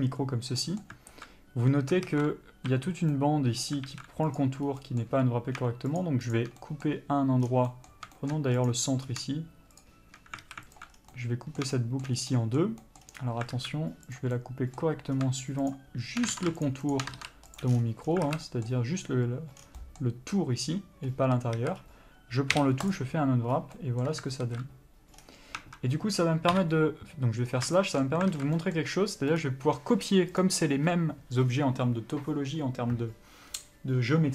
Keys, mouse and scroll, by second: 0.9 middle click, 2.4 alt+a, 3.0 a, 3.5 middle click, 4.2 alt+a, 4.6 click, 5.0 scroll up 1, 5.1 middle click, 5.5-6.3 scroll up 1, 6.3 shift+click, 6.9 middle click, 7.8 scroll down 1, 8.0 middle click, 8.5 shift+middle click, 8.9 click, 9.4-10.1 scroll up 1, 10.1 shift+click, 10.7 alt+a, 11.1 alt+click, 11.3 scroll down 1, 11.4 middle click, 12.1 shift+middle click, 12.7 middle click, 13.3 scroll up 1, 13.4 scroll down 1, 13.5-13.9 scroll up 1, 13.9 alt+a, 14.4 click, 14.7 middle click, 15.3-16.0 scroll up 1, 16.0 shift+click, 16.6 ctrl+z, 17.0 shift+click, 17.9 ctrl+e, 18.0 scroll down 1, 18.6 alt+a, 18.8 middle click, 19.9 scroll down 1, 20.1 middle click, 21.2 scroll up 1, 21.9 a, 22.1-23.2 scroll up 1, 23.2 u, 24.7 alt+a, 25.5-25.9 scroll down 1, 25.9 Tab, 26.8 KP_Divide, 27.8-28.1 scroll down 1, 28.1 shift+middle click, 28.6 alt+a, 28.9 middle click, 29.7 click.